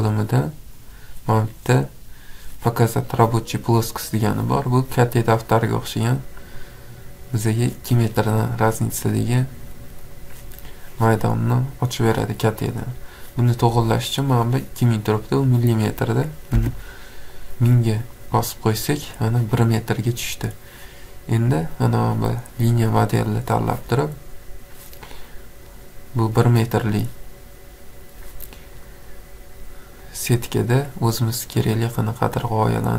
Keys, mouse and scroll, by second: 0.1 click, 3.5 click, 4.4-4.9 scroll, 5.1 scroll, 6.4-8.5 scroll, 8.5 click, 8.5 scroll, 9.3-9.7 scroll, 15.7 click, 16.6 1, 18.3 click, 19.1 scroll, 20.7 scroll down 4, 20.8-21.3 scroll, 22.9 click, 25.1 click, 26.4 click, 26.9-27.7 scroll, 27.7 scroll, 29.0 click, 30.2 click, 31.5 click.